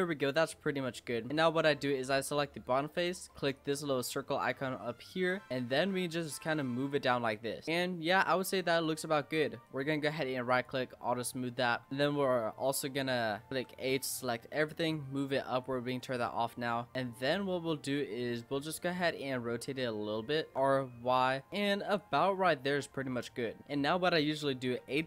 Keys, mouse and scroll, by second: 0.2 Tab, 0.5-1.2 middle drag, 1.2 Tab, 1.3-3.5 middle drag, 3.5 click, 4.2-4.6 scroll down 4, 4.6 middle click, 5.5 click, 7.6-9.6 middle drag, 9.6-11.0 right drag, 11.0-11.8 middle drag, 11.8 Tab, 13.5 a, 14.1 click, 15.6 click, 16.3 middle click, 17.1 click, 18.2 click, 19.3-20.5 middle drag, 20.5 r, 22.4-24.0 middle drag, 24.8 a.